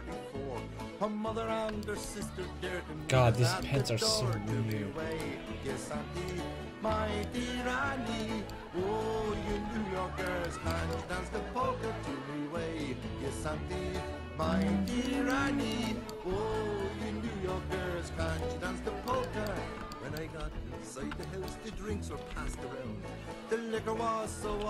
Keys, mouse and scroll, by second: 5.0 Tab, 5.2-7.3 right drag, 5.5 Tab, 8.9 a, 9.2 a, 9.5 c, 16.3 c, 18.1-20.1 drag, 18.3 x, 20.4 c, 22.3 KP_5, 22.4 KP_1, 24.5 KP_3.